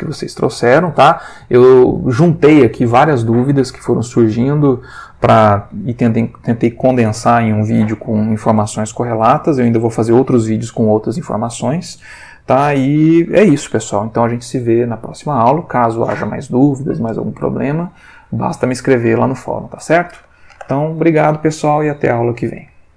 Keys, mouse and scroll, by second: 22.6 click.